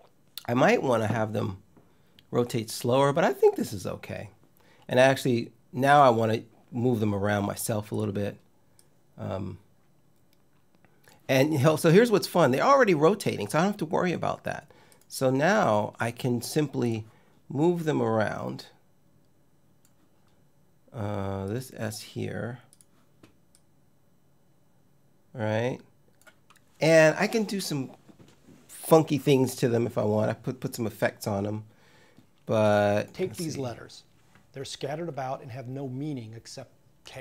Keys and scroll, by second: 32.8 space.